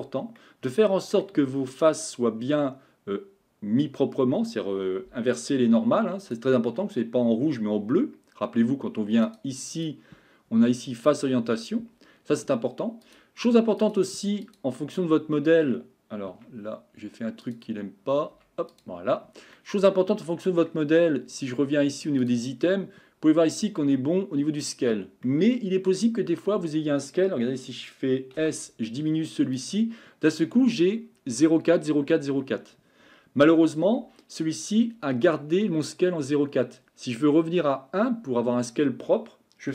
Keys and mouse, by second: 0.4 middle click, 9.3 click, 9.7-12.0 drag, 13.0 click, 14.5-15.4 drag, 15.4 middle click, 16.4 Tab, 18.7 click, 19.5-20.6 middle drag, 22.2 click, 25.2 middle click, 28.4 s.